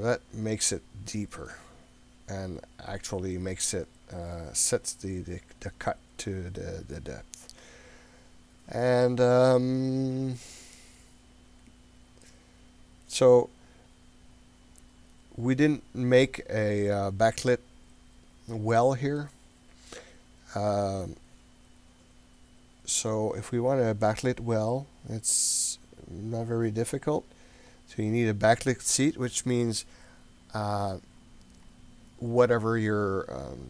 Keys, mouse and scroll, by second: 1.6-1.9 scroll up 1, 19.2-23.2 middle drag, 27.7-33.6 drag.